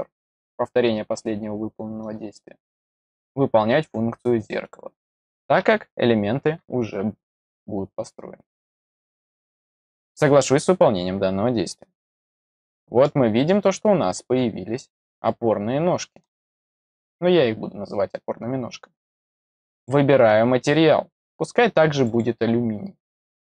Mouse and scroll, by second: 0.3 click, 3.1 click, 4.6 click, 10.3 click, 12.1-13.5 middle drag, 15.2-16.2 middle drag, 19.7 click, 21.9 click, 22.0 click.